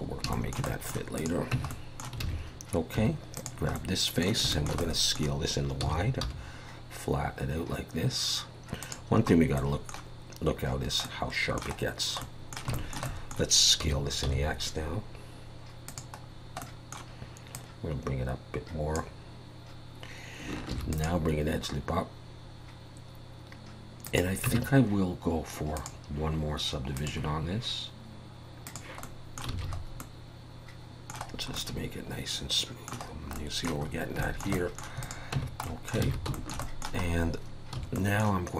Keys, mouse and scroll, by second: 0.3 shift+middle click, 0.7 middle click, 1.2 click, 1.5 Tab, 1.7 middle click, 2.2 alt+a, 3.0 3, 3.4 click, 3.8 middle click, 4.5 shift+middle click, 4.8 middle click, 5.8 s, 9.3-9.6 scroll up 3, 9.6 middle click, 11.0 middle click, 11.8-12.2 scroll down 2, 12.2 middle click, 12.7 shift+middle click, 12.9 shift+middle click, 13.0 middle click, 13.8 s, 16.2-16.6 scroll down 3, 16.6 middle click, 17.5 click, 20.7 ctrl+r, 24.5 Tab, 25.8 click, 26.9 click, 28.6 click, 29.0 middle click, 29.5 alt+a, 29.7 scroll up 3, 30.0 middle click, 31.3 scroll down 3, 31.6 middle click, 33.1 scroll down 1, 33.3 middle click, 33.8-34.2 scroll up 3, 34.2 shift+middle click, 34.5 middle click, 35.0 click, 35.4 Tab, 35.6 middle click, 36.1 alt+a, 36.3 middle click, 36.6 middle click, 37.0 scroll up 2, 37.8 3, 37.9 middle click.